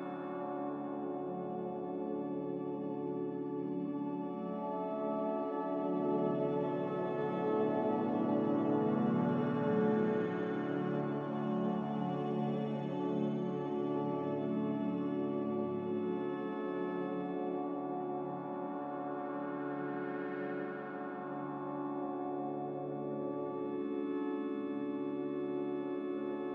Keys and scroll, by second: 24.1 Return.